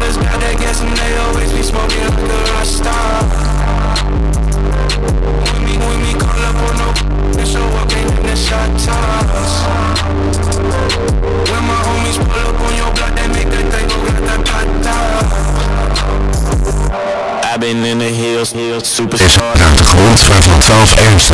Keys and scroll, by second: 1.9 o, 2.3-3.2 Down, 3.4 Down, 3.5 Return.